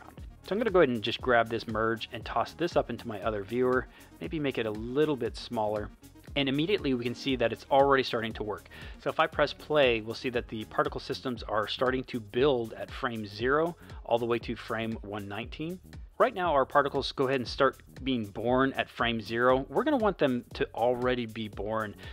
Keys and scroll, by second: 9.3 space, 11.8 space, 14.3 space, 15.9 space, 16.8 space, 19.6 space, 21.0 space.